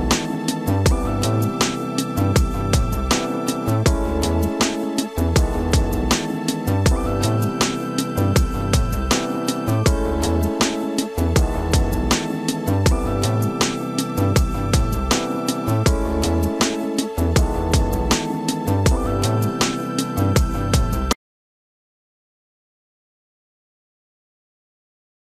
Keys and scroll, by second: 7.5 space, 10.9 ctrl+shift+s, 13.0 ctrl+shift+s, 16.3 0, 16.7 Return, 18.9 Return.